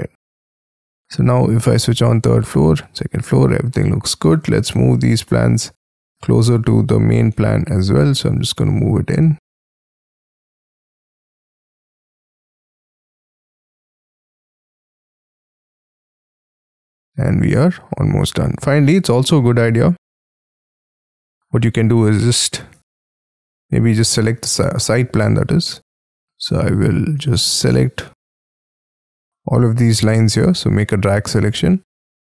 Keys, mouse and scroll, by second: 0.4-3.3 scroll up 5, 3.3-3.7 scroll down 6, 3.7-6.3 scroll up 6, 6.3 double click, 6.7 double click, 7.4 m, 8.7 shift+click, 9.2 space, 9.8 m, 11.7 shift+click, 12.2 space, 12.3-13.1 scroll up 12, 13.7 m, 14.7 space, 16.1 double click, 16.2 space, 16.6-17.1 scroll down 6, 17.1 scroll up 4, 17.8-18.2 scroll up 5, 18.2 scroll down 7, 19.9-21.1 scroll down 5, 21.1 scroll down 1, 21.3-22.0 scroll up 5, 22.0-22.8 scroll down 5, 22.8 Escape, 23.4-24.1 scroll down 7, 24.1-25.5 scroll up 5, 25.6 double click, 31.3-31.9 scroll up 6, 31.9 scroll down 1.